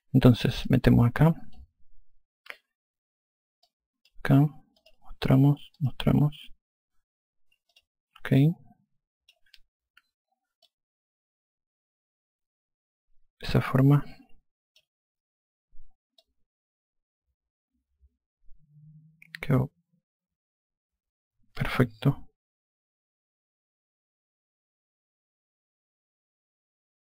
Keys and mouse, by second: 1.0 click, 4.0 click, 5.2 click, 8.1 click, 8.8 alt+click, 11.0 alt+click, 16.6 alt+click.